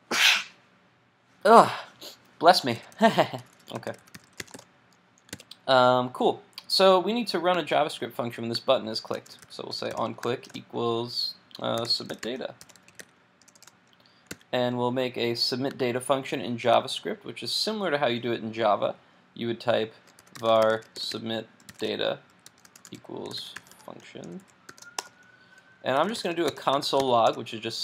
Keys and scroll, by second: 5.3 super+s, 14.3 super+s.